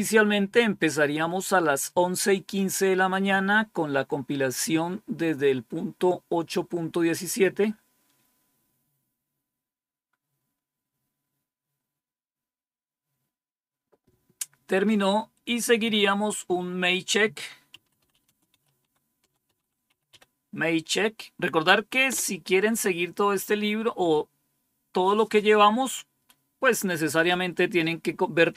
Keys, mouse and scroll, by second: 16.8 click, 17.4-20.5 typing, 22.0 Return.